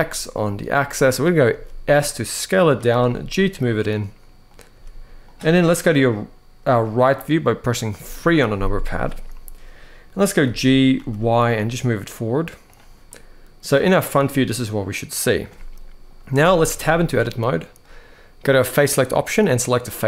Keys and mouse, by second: 1.2 s, 2.4 click, 2.7 g, 4.5 s, 5.0 click, 7.7 KP_3, 10.2 g, 10.7 y, 12.8-13.4 middle drag, 13.9-15.1 middle drag, 16.4 Tab, 16.6 middle click, 19.6 middle click.